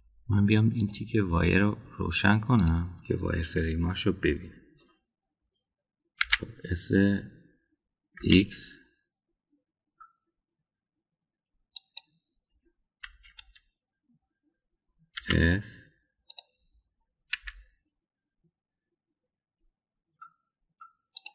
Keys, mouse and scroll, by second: 1.8-4.1 drag, 7.2 s, 14.0 KP_1, 14.3 KP_3, 16.2 s, 18.3 g.